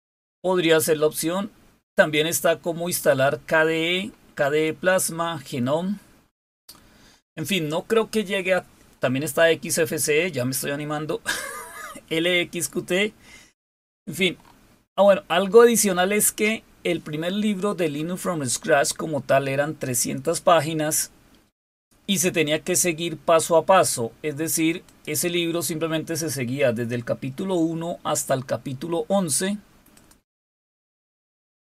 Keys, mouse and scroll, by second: 2.2-7.5 scroll down 10, 9.6-13.8 scroll down 8, 14.2-23.5 scroll up 4, 24.6 click, 29.7 click.